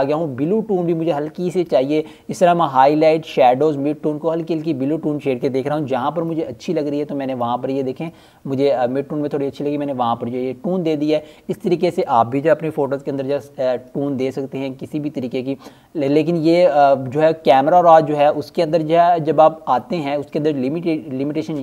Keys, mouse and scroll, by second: 7.1 click, 12.1 click.